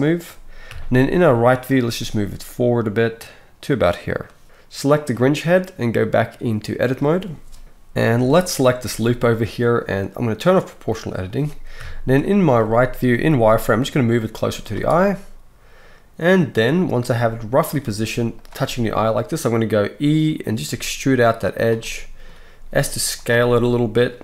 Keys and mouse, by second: 0.7 KP_3, 1.8 g, 4.8 click, 6.0-6.9 drag, 6.9-8.8 middle drag, 7.6 alt+a, 8.8-10.4 alt+shift+drag, 10.4 middle click, 10.5-14.9 drag, 11.7 KP_3, 12.5 z, 13.5 g, 14.4 z, 14.9-24.2 right drag, 17.1 g, 17.8 s, 20.7 e, 22.5 s.